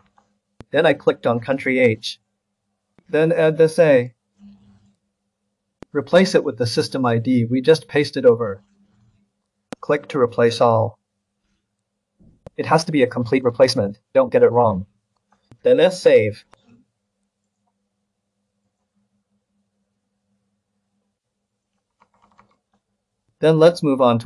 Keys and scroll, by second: 14.5 ctrl+s, 22.0 ctrl+c.